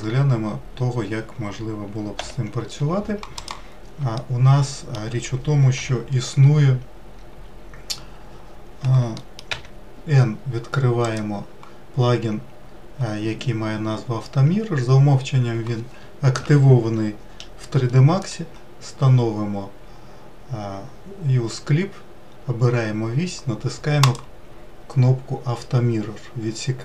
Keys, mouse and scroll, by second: 2.2 Delete, 3.4 click, 4.1-5.8 shift+middle drag, 5.8 KP_Decimal, 6.5-7.1 scroll down 4, 9.2 middle click, 9.5 n, 11.0-14.1 drag, 24.0-26.8 drag.